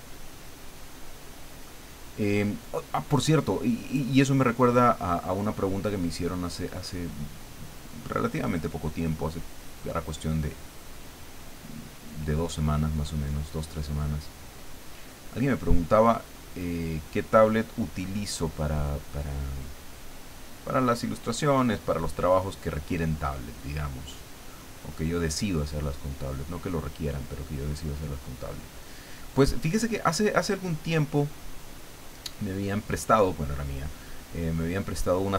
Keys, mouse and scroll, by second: 1.1 click, 2.2-5.0 drag, 5.6-8.6 drag, 9.2-12.3 drag, 12.7-14.9 drag, 16.0-18.3 drag, 18.9-21.5 drag, 22.0-24.5 drag, 25.3-29.0 drag, 30.2-31.7 drag, 34.5-35.3 drag.